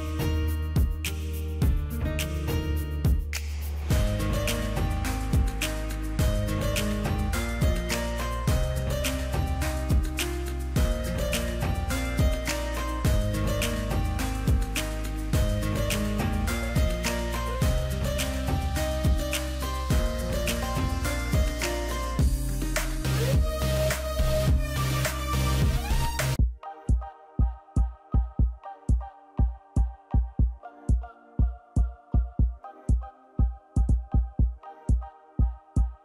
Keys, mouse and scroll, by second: 15.3 click, 15.4 click, 16.4 click, 19.5 ctrl+-, 20.1 ctrl+-, 33.1 w, 35.3 Return.